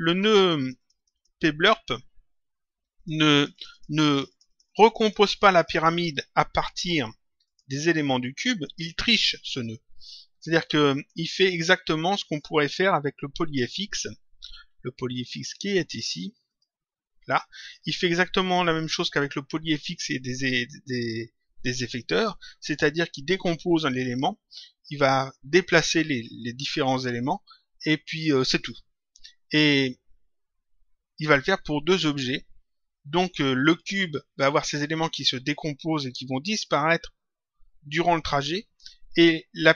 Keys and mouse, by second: 2.9 click, 8.5 click, 16.4 click, 22.1 click.